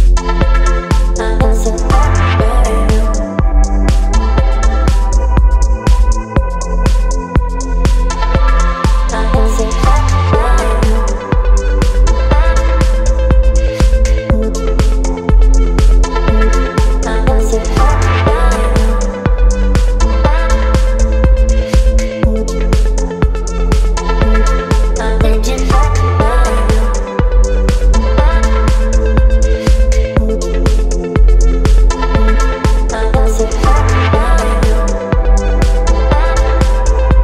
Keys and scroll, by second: 1.5 ctrl+a, 2.1-7.0 typing, 7.7 ctrl+a, 12.9 v, 13.8 Down, 20.6 ctrl+t, 21.4 Down, 24.4 Down, 24.6 Down, 24.7 Down, 25.2 Return, 26.8 space.